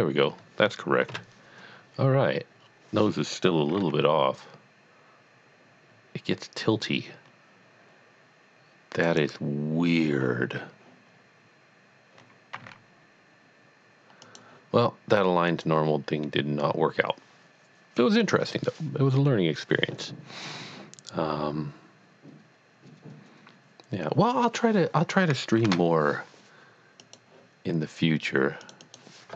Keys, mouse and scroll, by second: 1.1 KP_1, 2.6 scroll down 1, 3.8 g, 9.0 g, 9.2 right click, 10.3-10.7 scroll up 1, 12.5 scroll up 1, 12.6 z, 14.2 click, 15.5 click, 25.7 shift+a, 27.0 click, 28.6 click.